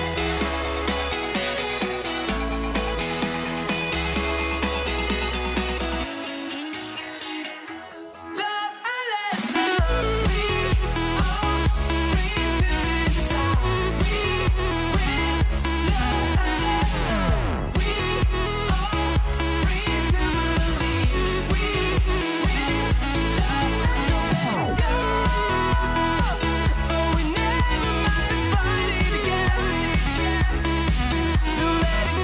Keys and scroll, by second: 8.0 super+-, 17.5 super+d, 18.3 super+=, 23.8 super+g, 24.1 super+r, 26.6 super+c, 27.9 shift+super+v.